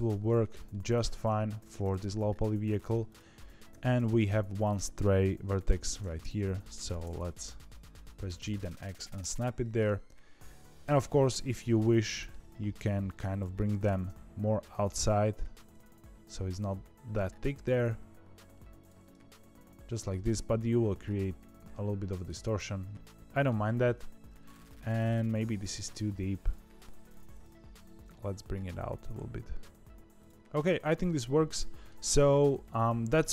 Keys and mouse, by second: 0.2 shift+middle click, 0.6 middle click, 1.1 Tab, 1.5 2, 3.4 3, 3.6 1, 3.8 click, 4.1 middle click, 5.6 g, 7.1-9.7 middle drag, 10.6 2, 10.6 1, 11.8 middle click, 13.8 g, 19.0-20.0 middle drag, 20.7-22.2 middle drag, 22.5 middle click, 25.0 middle click, 27.0 shift+click, 27.2 shift+click, 28.1 g, 30.3 Tab, 30.3 middle click, 31.4 middle click, 32.0 shift+middle click, 32.8 ctrl+s, 33.2 middle click.